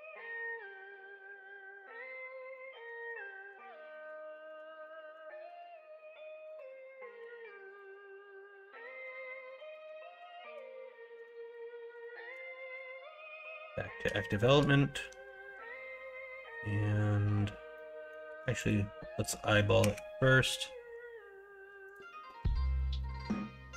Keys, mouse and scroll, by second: 2.5-3.0 middle drag, 3.3 shift+middle drag, 3.9 middle drag, 4.3 shift+middle drag, 4.8-5.1 middle drag, 5.4 Tab, 7.2 1, 9.4 2, 14.2 shift+middle click, 17.7 middle click, 18.2 1, 19.8 g, 22.3 KP_1, 22.5 KP_3, 22.8 alt+z.